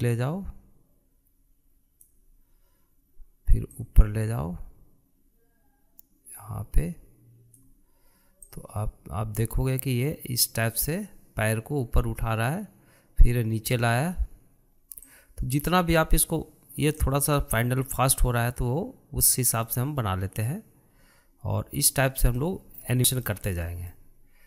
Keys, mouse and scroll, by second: 0.2-3.1 drag, 4.7 click, 9.5 click, 16.0-19.0 drag, 19.2-22.2 drag, 23.3-24.0 shift+middle drag, 24.0 scroll up 2, 24.3-24.4 shift+middle drag.